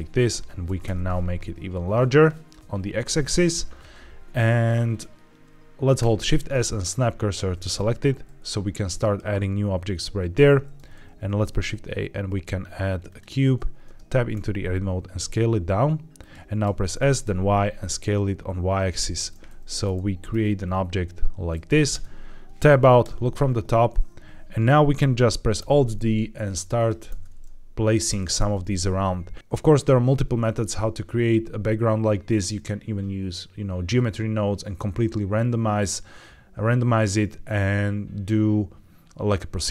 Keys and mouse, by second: 0.3 Tab, 0.5 s, 0.7 x, 2.2 click, 3.1 Tab, 6.1 shift+s, 11.2 shift+a, 13.7 Tab, 14.3 s, 16.1 click, 16.5 s, 16.9 y, 18.8 click, 19.4 middle click, 21.8 Tab, 22.9 KP_7, 25.5 alt+d, 26.7 click, 27.0 alt+d, 28.3 alt+d, 30.3 shift+middle click.